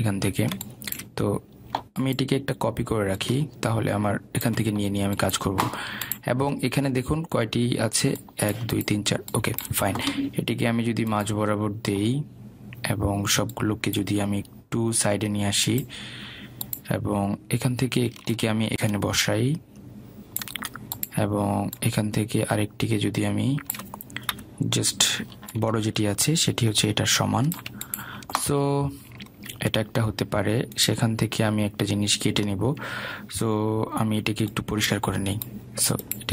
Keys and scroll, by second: 25.4 Delete.